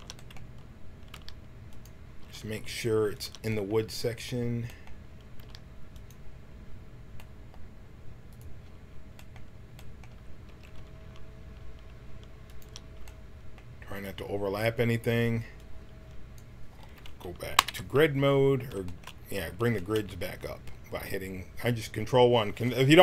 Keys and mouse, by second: 1.1 g, 2.2 g, 7.1 g, 8.3-10.4 drag, 10.4 s, 13.9-15.5 drag, 17.5 ctrl+KP_1.